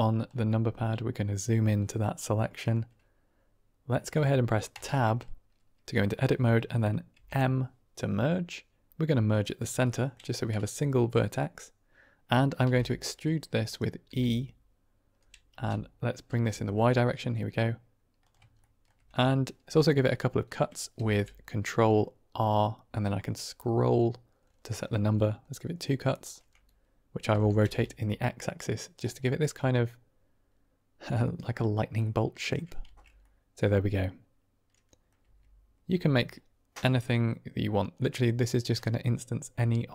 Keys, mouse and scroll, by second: 0.4-1.3 middle drag, 1.7 middle click, 1.9-2.6 drag, 4.6 Tab, 7.0 m, 9.8 click, 12.8 r, 13.6 click, 14.0 e, 15.4 c, 16.5 u, 16.8 u, 16.8 y, 18.1 click, 18.5 shift+click, 20.9 ctrl+r, 27.2 r, 27.6 x, 28.8 click, 29.1 middle click, 31.1 click, 32.0 middle click, 32.9 Tab, 33.1-35.0 middle drag, 35.1 Tab, 35.8 Tab, 37.9-38.5 middle drag.